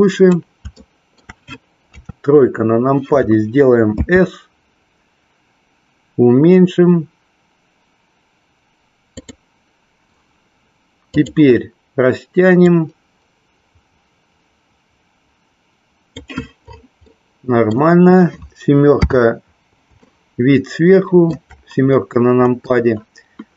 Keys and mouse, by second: 0.8 shift+middle click, 1.9 KP_3, 3.9 s, 9.1 click, 11.1 click, 12.5-16.3 drag, 17.1 middle click, 18.9 KP_7, 20.0-21.3 middle drag.